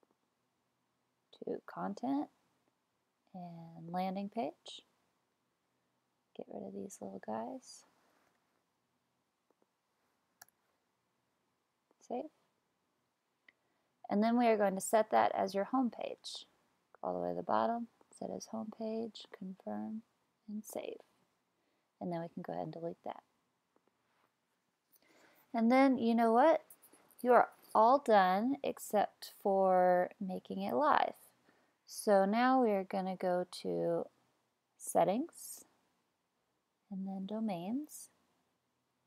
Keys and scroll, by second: 8.0 Right, 8.3 BackSpace.